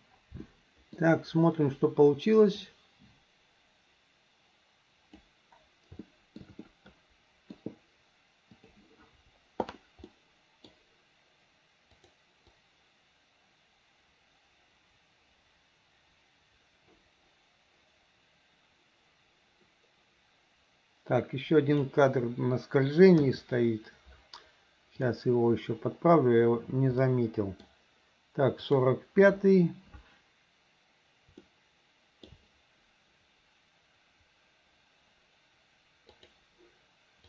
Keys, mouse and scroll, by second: 0.5 middle click, 2.7-5.3 drag, 6.1 shift+middle click, 6.7 middle click, 8.6 click, 10.1 middle click, 12.0 click, 12.5-21.9 drag, 23.2 KP_3, 25.0 click, 27.0 middle click, 28.7 click, 31.5-32.3 shift+middle drag, 36.2 click.